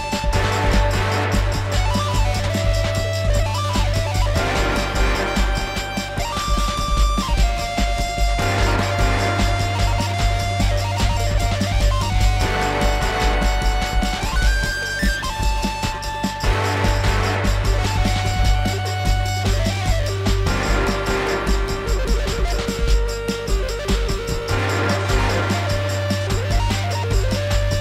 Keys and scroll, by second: 8.2 ctrl+z, 16.1 ctrl+s, 25.0 F4.